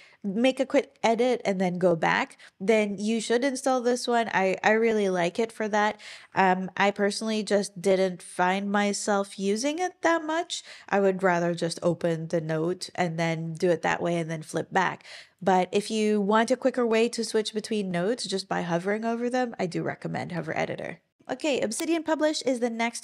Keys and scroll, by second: 6.2 Escape, 20.4 Escape.